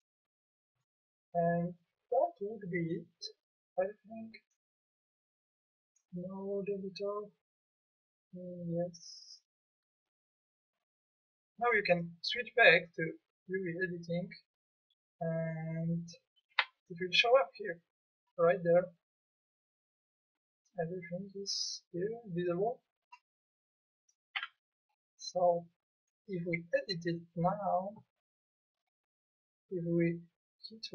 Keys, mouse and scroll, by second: 2.3 click, 2.5 click, 6.4-7.6 middle drag, 8.9-13.1 middle drag, 16.5 Tab, 24.4 Tab.